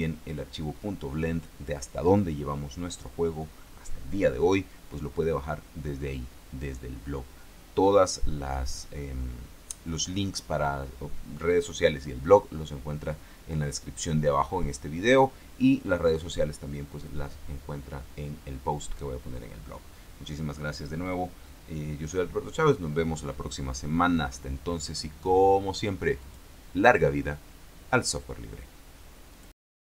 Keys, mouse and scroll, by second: 26.5 click, 29.6 click.